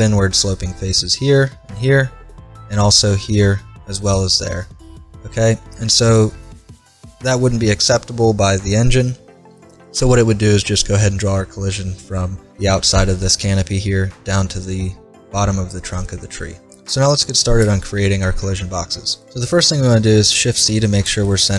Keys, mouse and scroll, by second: 5.0-6.6 middle drag, 20.3 shift+c, 21.3 middle click.